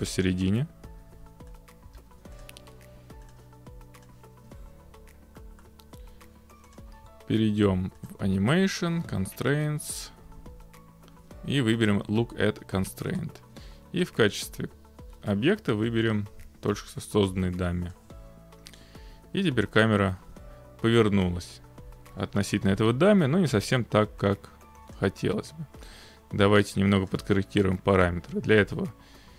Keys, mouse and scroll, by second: 0.9 0, 1.6 click, 1.9 0, 2.4 click, 3.3 click, 4.1 click, 4.8-6.2 scroll, 6.7 middle click, 6.9-7.9 drag, 8.1-9.1 drag, 13.2-14.2 drag, 17.9-19.0 drag, 24.9-28.2 drag.